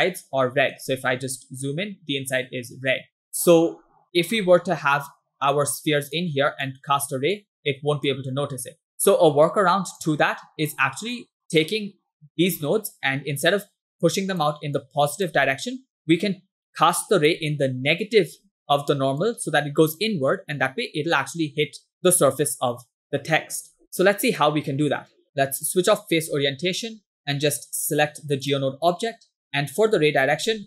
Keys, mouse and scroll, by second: 2.3-2.8 scroll down 1, 3.3-5.1 scroll down 1, 5.1-6.3 drag, 6.7 click, 7.4 click, 8.7-10.0 ctrl+drag, 10.4 scroll down 3, 10.9 middle click, 11.7 click, 14.1 click, 14.9 click, 16.7 ctrl+click, 18.4 click, 19.2 click, 23.9 ctrl+click, 25.2 click, 26.3 Tab, 27.2 click, 28.5 click, 29.4 scroll down 2, 29.6 middle click, 29.9 scroll up 1.